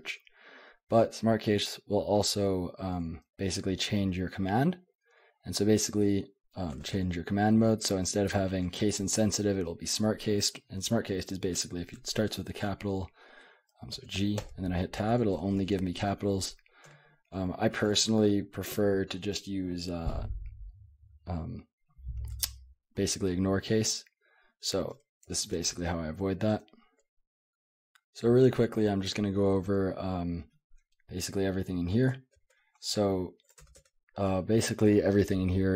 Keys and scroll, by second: 6.8 shift+;, 14.0 shift+g, 14.4 Tab, 15.0 Tab, 15.2 Tab, 15.4-16.9 Tab, 16.9 Escape, 24.7-26.9 typing, 26.5 Escape, 29.6-33.5 typing, 33.6 Return, 33.7 Return.